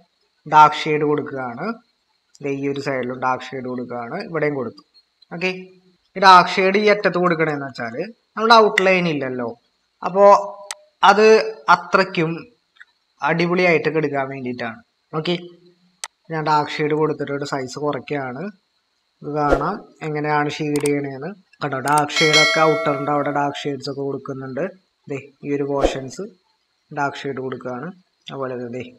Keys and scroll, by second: 6.9-7.8 typing, 16.9-17.5 typing.